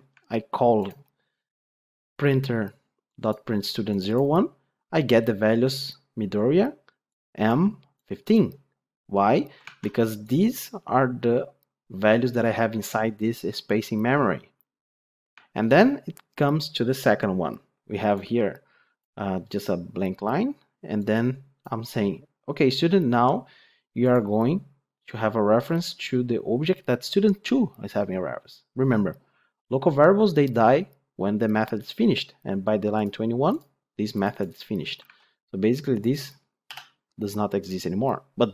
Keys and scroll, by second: 32.9 ctrl+F8.